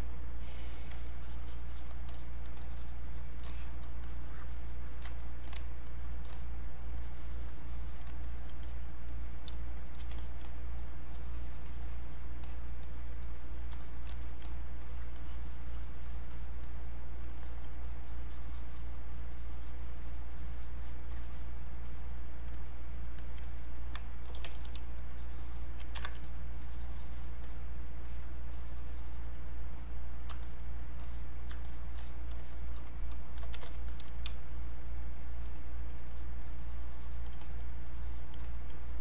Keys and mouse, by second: 1.1 shift+click, 2.6 shift+click, 4.1 shift+click, 5.5 click, 7.0 click, 9.5 space, 9.9-12.5 drag, 14.5-17.5 drag, 17.9-19.3 drag, 19.3-21.1 drag, 21.1 click, 24.0-24.9 typing, 24.6 click, 25.1 alt+click, 26.0 ctrl+z, 26.3-30.5 drag, 31.7 shift+click, 32.4 shift+click, 33.2-34.3 typing, 33.9 click, 34.7 click, 35.6 click, 36.1 alt+click, 37.4 click, 37.9 alt+click, 38.8 alt+click.